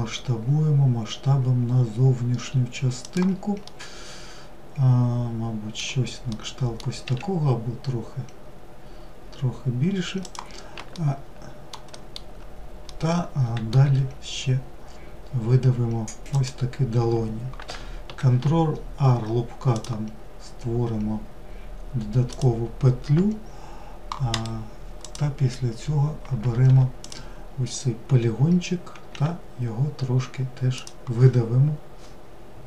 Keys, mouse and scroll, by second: 2.4-5.8 middle drag, 5.8 s, 9.7 alt+middle click, 10.7 alt+middle click, 11.7-12.6 middle drag, 12.6 e, 23.1-25.8 right drag, 25.8 click.